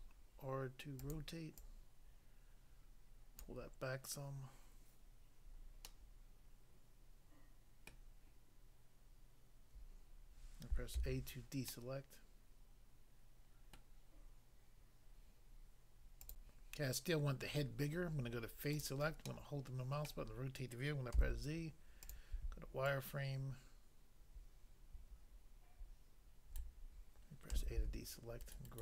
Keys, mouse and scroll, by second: 1.0 click, 1.1 click, 1.6 click, 3.4 click, 5.8 middle click, 7.9 middle click, 11.0 a, 11.7 middle click, 13.7 middle click, 16.3 click, 16.5 click, 18.8 click, 19.3 middle click, 20.1 middle click, 21.2 z, 22.0 click, 22.1 click, 22.9 ctrl+right click, 27.5 a, 28.4 ctrl+right click, 28.5 ctrl+right click, 28.6 ctrl+right click.